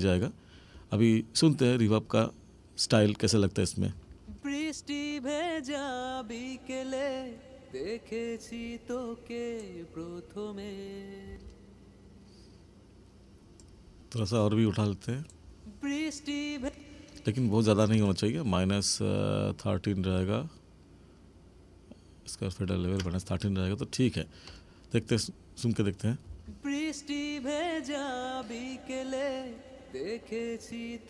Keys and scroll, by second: 4.0 space, 11.2 space, 15.4 space, 26.3 space.